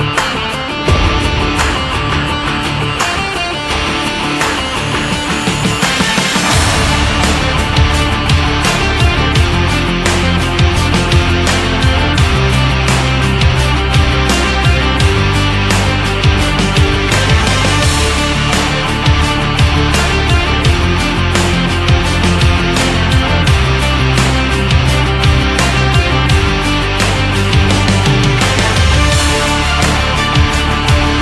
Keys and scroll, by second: 2.3 ctrl+c, 2.6 ctrl+f, 12.1 ctrl+c, 12.6 ctrl+f, 18.1 4, 18.4 5, 19.4 Return, 22.8 ctrl+0, 24.2 ctrl+=, 28.8 shift+x.